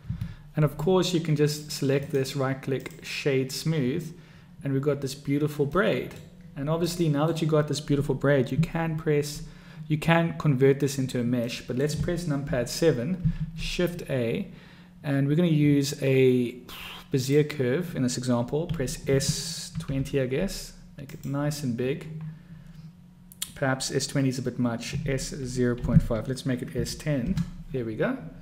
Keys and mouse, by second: 2.4 click, 6.0-6.5 drag, 7.1-7.6 drag, 11.7-12.1 drag, 12.7 KP_7, 13.5 shift+a, 18.9 s, 25.3 s.